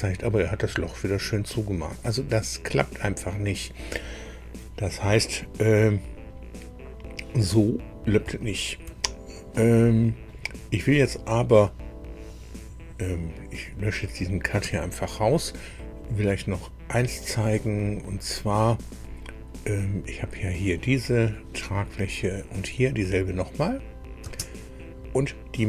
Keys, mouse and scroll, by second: 0.8-2.1 drag, 6.0 scroll down 2, 7.5 click, 8.4 shift+middle click, 9.3 shift+click, 9.4-10.4 middle drag, 13.5 click, 14.6 Delete, 17.3 click, 18.0-18.3 scroll down 1, 22.3 click, 24.2 space.